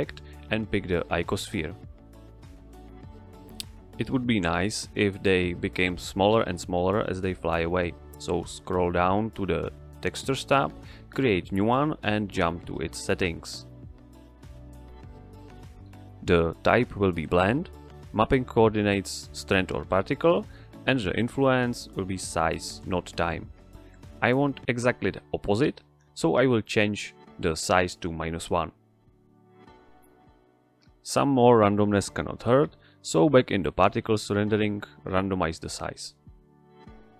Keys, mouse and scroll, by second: 0.6 ctrl+click, 1.6 ctrl+click, 5.7 a, 7.3 click, 9.6 scroll down 1, 11.4 click, 11.9 scroll down 1, 13.4 click, 20.3 click, 22.4-22.8 scroll down 1, 23.8 click, 24.3 scroll down 1, 25.6 click, 29.0 Return, 33.3 click, 34.9 click.